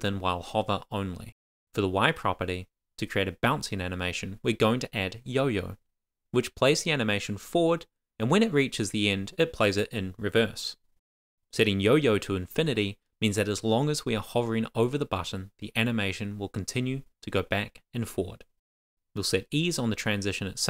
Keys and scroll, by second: 3.8 Up, 4.0 super+Right, 5.8 Return, 7.8 Tab, 8.4-11.5 typing, 8.7 Return, 9.8 Return, 11.8 Tab, 12.7 super+s, 13.2 Up, 19.3 Return, 19.9 shift+;.